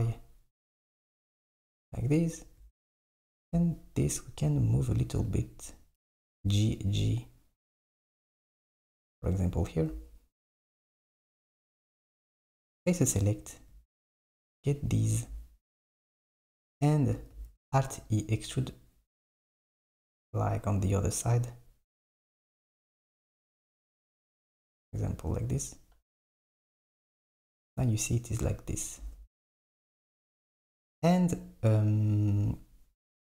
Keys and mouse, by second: 4.1 click, 5.3 g, 12.6-13.6 drag, 14.6 shift+click, 17.3 alt+e, 26.2 Tab, 27.1 click, 29.0 Tab, 30.7 Tab.